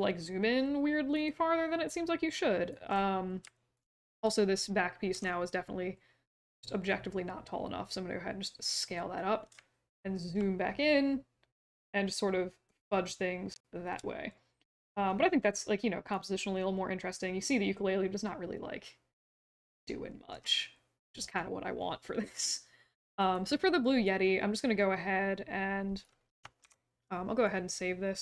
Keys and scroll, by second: 5.1 r, 26.6 ctrl+s.